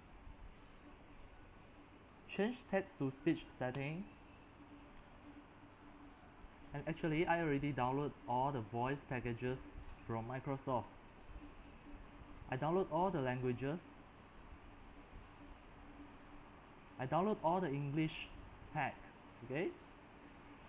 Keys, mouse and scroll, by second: 4.0-7.1 drag, 7.1-8.3 scroll down 3, 8.3-9.4 scroll down 1, 9.4-17.2 middle drag, 9.4-10.9 scroll, 13.5-15.1 scroll down 6, 15.1-16.1 scroll up 9, 16.1 scroll, 17.2 scroll up 2, 17.4-20.6 middle drag, 19.7-20.3 scroll, 20.6 scroll up 5.